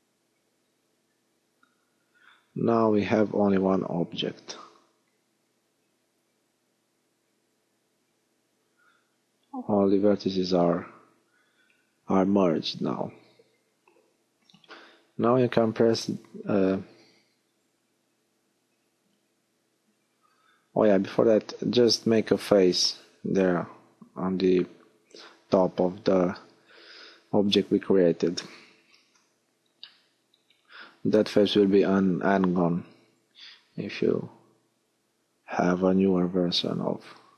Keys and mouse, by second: 1.2 middle click, 9.6 middle click, 11.1 a, 18.2-21.0 middle drag, 21.0 f, 25.2 middle click, 28.1 middle click, 35.6 alt+h.